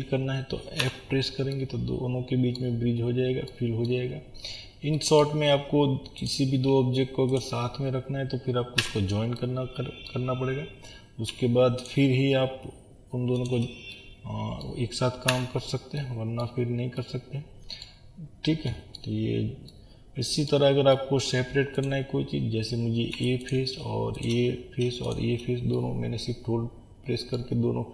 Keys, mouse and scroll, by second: 0.9 f, 1.5-6.3 middle drag, 2.9-3.5 scroll up 1, 4.1-5.0 scroll down 1, 6.3 click, 8.8 f, 9.4-11.9 middle drag, 11.3 2, 11.9 click, 13.9-15.3 middle drag, 15.3 f, 16.1 middle click, 16.6 scroll down 1, 16.8-17.9 middle drag, 17.9-18.7 scroll up 1, 18.7 middle click, 19.1 scroll down 1, 19.7-21.9 middle drag, 21.9 click, 23.1 3, 23.5 click, 24.3 shift+click, 25.8-27.9 middle drag.